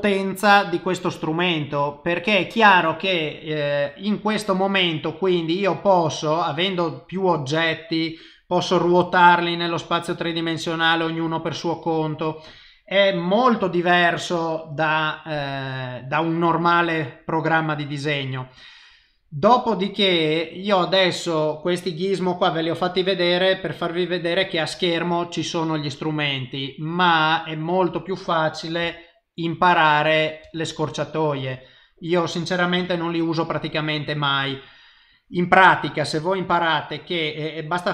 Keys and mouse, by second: 31.5 middle click, 31.5 n, 32.8 KP_0, 36.5 click.